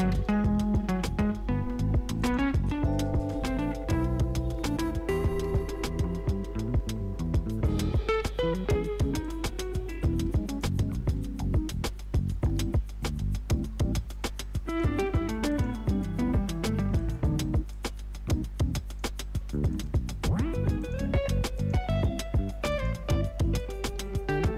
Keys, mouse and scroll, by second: 0.5 Return, 2.2 click, 5.5 space, 6.0 -, 8.8 space, 9.2 click, 10.7 u, 11.9-12.8 typing, 14.7 click, 16.0 [, 17.0 click, 17.9 [, 18.9 click, 19.9 [, 20.8 click, 21.9 [, 22.7 click, 23.9 [.